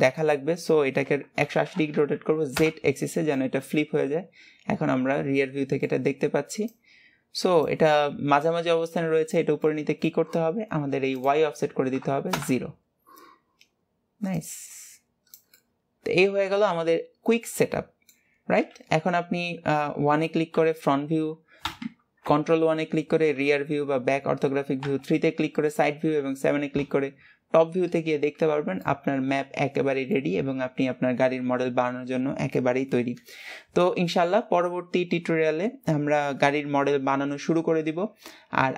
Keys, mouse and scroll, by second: 3.5-6.6 middle drag, 9.8-11.3 middle drag, 11.3-15.7 drag, 15.7-18.8 middle drag, 18.8 KP_1, 19.6 scroll up 2, 20.8 KP_1, 27.3 scroll down 4, 28.0-29.0 scroll up 2, 29.0-32.1 middle drag.